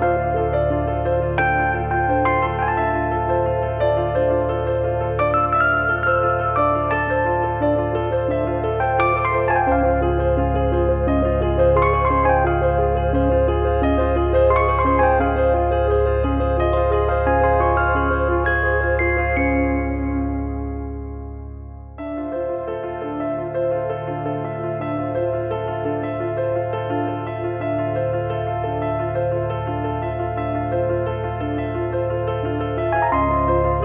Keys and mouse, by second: 8.9 click, 9.9 click, 15.2 3, 15.5 click, 16.9 Delete, 20.6 click, 22.2 click, 23.7 click, 26.2 click, 26.6 z, 26.9 click, 29.2 click, 30.1 click, 31.0 click, 31.9 click, 32.7 click.